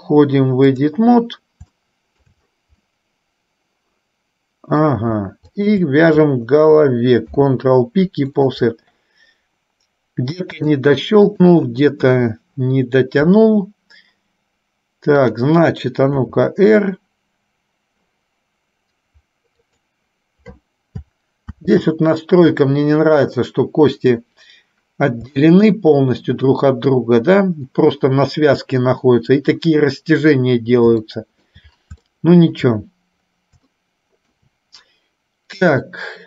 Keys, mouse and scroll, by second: 1.9 shift+middle click, 3.0-5.0 middle drag, 5.7 shift+click, 7.4 ctrl+p, 10.8-11.9 drag, 12.2 KP_3, 15.2 click, 16.3 r, 21.7 ctrl+z, 25.5 shift+middle click, 31.3 shift+middle click, 32.3 shift+middle click, 33.8 shift+middle click, 35.7 click.